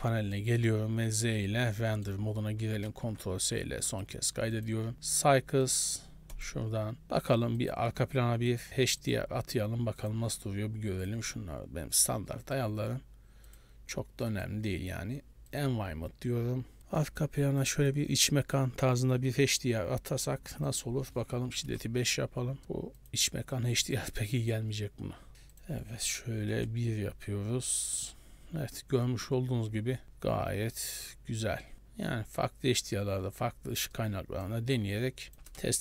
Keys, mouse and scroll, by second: 0.2 middle click, 0.6 z, 1.6-2.2 scroll up 2, 2.0 middle click, 3.2 ctrl+s, 4.1 click, 4.6 click, 5.7 click, 7.6 click, 8.6 click, 8.7 click, 9.1 click, 9.5 scroll down 4, 10.1 click, 11.1 click, 11.3 scroll down 2, 12.1 click, 13.6 click, 14.4 click, 15.6 click, 20.7 click, 22.6 middle click, 23.1 click, 25.3 middle click, 25.6 click, 27.8 middle click, 28.2-28.8 scroll up 6, 30.9 click, 32.2 scroll down 4, 33.6-34.0 scroll down 4, 34.0 middle click, 35.3 click.